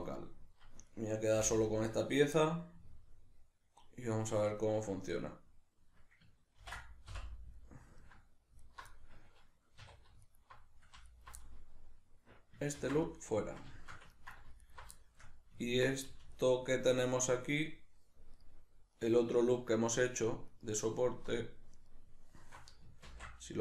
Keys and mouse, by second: 0.9 right click, 1.3 l, 2.4-8.6 middle drag, 6.6 ctrl+i, 8.6 alt+right click, 8.9-10.3 middle drag, 9.8 2, 10.3 alt+right click, 11.1 right click, 11.4-14.6 middle drag, 12.8 ctrl+x, 14.6 alt+right click, 15.0-16.4 shift+middle drag, 16.4 alt+shift+right click, 17.0 alt+shift+right click, 17.4 alt+shift+right click, 18.4 alt+shift+right click, 19.0 alt+shift+right click, 19.6 alt+shift+right click, 20.0 alt+shift+right click, 20.5 alt+shift+right click, 21.8 alt+shift+right click, 23.1 ctrl+x.